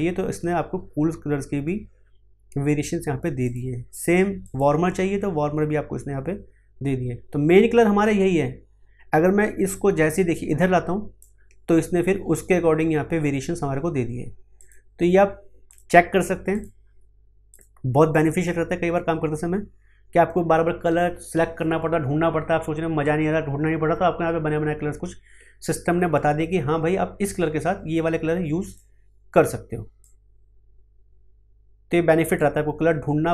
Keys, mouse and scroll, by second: 3.4 click, 9.7-14.5 drag, 29.8-33.3 drag.